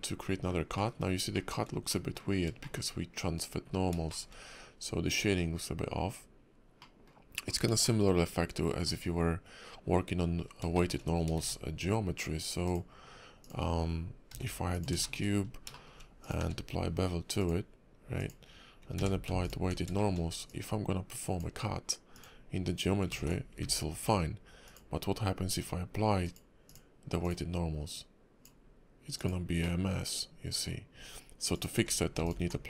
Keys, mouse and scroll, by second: 0.2 scroll down 3, 0.7 middle click, 1.0 scroll up 2, 1.3 shift+middle click, 1.9 middle click, 2.6 shift+middle click, 3.6 scroll up 1, 4.1 shift+middle click, 5.2 scroll down 3, 5.6 scroll up 2, 6.8 middle click, 7.5 scroll down 2, 7.8 shift+middle click, 8.1-8.6 scroll up 4, 8.9-9.6 scroll down 1, 10.2-10.6 scroll down 6, 10.7 shift+middle click, 11.0-11.4 scroll down 2, 11.4 shift+a, 14.3 g, 15.0 shift+middle click, 15.2 scroll up 3, 15.7 shift+middle click, 16.2 click, 16.4 q, 18.9 q, 20.0 shift+middle click, 20.5 click, 23.1 ctrl+z, 23.6 ctrl+`, 27.9 click, 29.6 middle click, 31.5 click, 31.7 q.